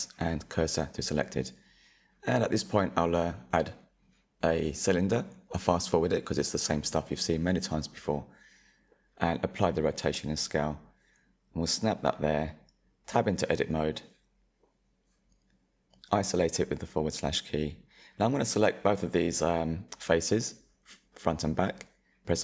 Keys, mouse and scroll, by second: 1.0 scroll down 4, 1.1 middle click, 1.4 KP_1, 1.7-2.0 drag, 3.0 s, 3.9 drag, 4.4-4.7 scroll up 5, 4.4 middle drag, 5.1-5.7 shift+middle drag, 5.7 s, 6.3 s, 7.8 ctrl+a, 8.5 shift+middle click, 9.4 click, 10.0 click, 10.1 middle click, 10.3 scroll up 1, 10.4 click, 10.6 Tab, 11.2 click, 11.5 click, 11.7-14.2 middle drag, 12.9 Tab, 14.2 /, 15.0 Tab, 15.8-17.2 middle drag, 17.2 shift+click, 17.9-20.0 middle drag, 20.0 i.